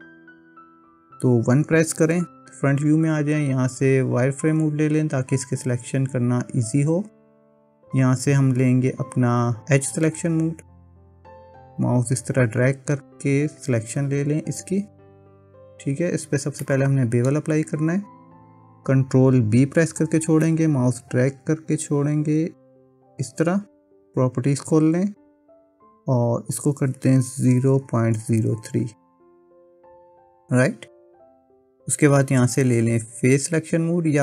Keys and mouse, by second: 0.0 click, 2.0 KP_1, 11.9-13.6 drag, 15.0 middle click, 16.6 middle click, 19.6 ctrl+b, 24.6 click, 26.5-30.5 drag, 31.3 click.